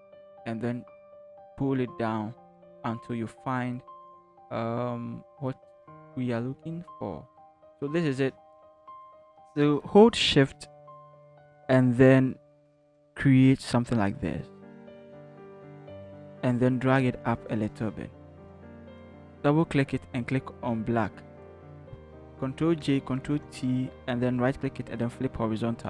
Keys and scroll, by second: 15.9 v, 17.0 shift+Up, 17.2 shift+Up, 22.2 ctrl+j, 23.1 ctrl+t.